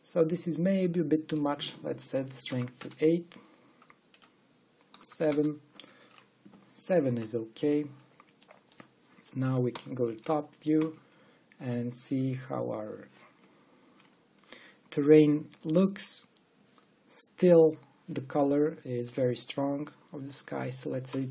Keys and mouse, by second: 2.1-3.8 drag, 4.8-6.6 drag, 9.1 middle click, 10.4 KP_7, 11.5 KP_5, 14.7-15.9 drag, 19.9-21.3 drag.